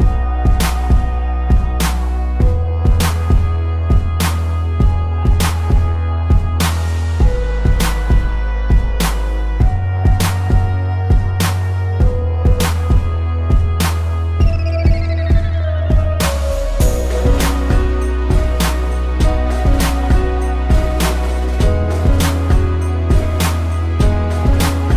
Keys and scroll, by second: 1.7 ctrl+z, 4.1 z, 4.5 space, 4.8 a, 4.9 v, 6.3 space, 7.0 space, 12.0 z, 12.5 a, 13.9 -, 15.0 a, 20.5 a, 20.9 ctrl+0, 21.2 z, 21.8 space, 23.1 space, 23.8 ctrl+-, 23.9 p, 24.3 ctrl+=.